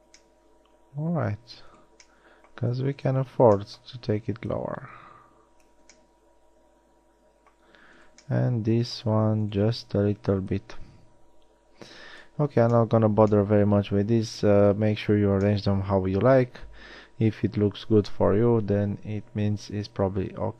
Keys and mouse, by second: 0.6 middle click, 9.0 middle drag, 12.6 a.